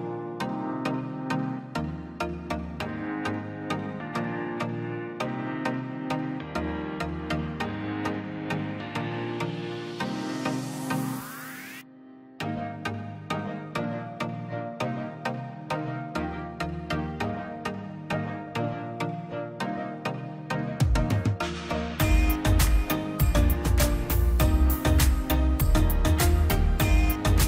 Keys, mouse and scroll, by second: 1.9 middle click, 2.5 scroll up 1, 2.7 space, 3.0 click, 3.8 l, 4.3 click, 5.3 space, 5.6-5.9 scroll down 1, 5.9 p, 6.1-7.4 drag, 7.4 scroll down 1, 7.7 middle click, 8.0 scroll down 1, 8.5 click, 9.4 scroll down 1, 10.6 l, 10.8-11.3 scroll up 1, 11.3 click, 12.2-12.8 scroll down 1, 12.8 p, 13.0 click, 13.7 scroll down 1, 13.9 middle click, 14.4 click, 15.5 scroll down 1, 16.0 click, 17.1 middle click, 17.3-18.0 scroll up 1, 18.0 l, 18.2-18.6 scroll up 1, 18.6 click, 19.2 space, 20.1 l, 20.2 click, 20.7-21.1 scroll up 1, 21.1 Escape, 21.4 middle click, 21.7 scroll up 1, 22.0 middle click, 22.4 scroll up 1, 22.6 click, 23.3 space, 23.7 l, 24.6 click, 24.9-25.2 scroll down 1, 25.3-26.5 middle drag, 26.5-27.4 drag.